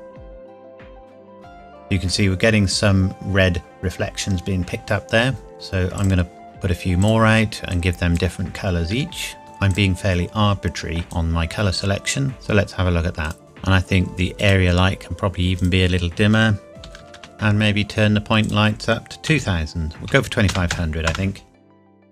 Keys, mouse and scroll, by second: 1.8 scroll, 2.0 scroll up 1, 5.5 shift+d, 5.9 click, 8.9 shift+d, 9.7 click, 12.3 scroll up 1, 13.2 click, 14.4 click, 17.0 KP_0, 17.0 KP_5, 17.3 click, 19.3 KP_2, 20.1 KP_5, 20.5 KP_0, 21.1 KP_Enter, 21.8 ctrl+c, 21.8 click.